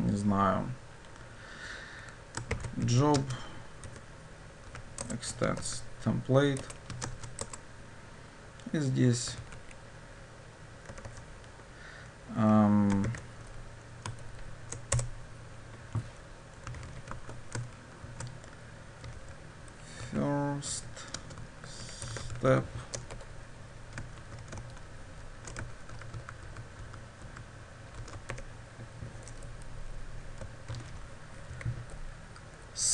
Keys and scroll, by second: 5.0 Return, 15.0 ctrl+o, 17.2 Tab, 24.3 ctrl+d, 25.0 ctrl+shift+Down, 26.0 ctrl+w, 28.0 ctrl+x, 29.4 Delete, 30.8 ctrl+v.